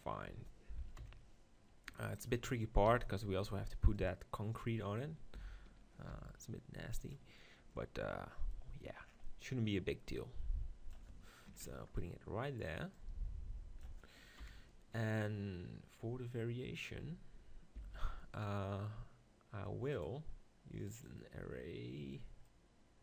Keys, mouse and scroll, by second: 0.3 Tab, 1.0 KP_7, 1.9-3.7 middle drag, 2.9 g, 4.1-6.0 drag, 5.3 s, 7.8-9.2 drag, 9.2-10.2 middle drag, 10.2-11.5 drag, 14.4 KP_7, 17.8 shift+d, 20.4-22.5 right drag, 22.5 middle click.